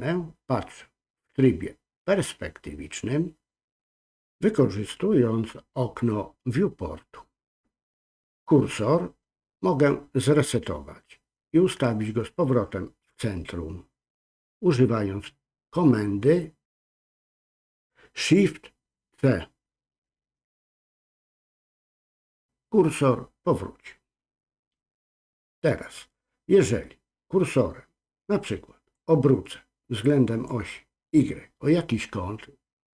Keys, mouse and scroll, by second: 28.9-30.5 drag.